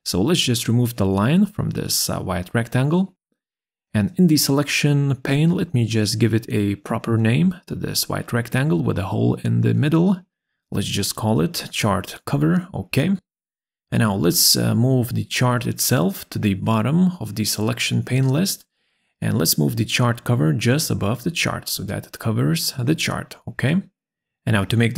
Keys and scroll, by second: 8.7-9.8 typing, 9.9 Return, 11.2 BackSpace, 11.6 Return.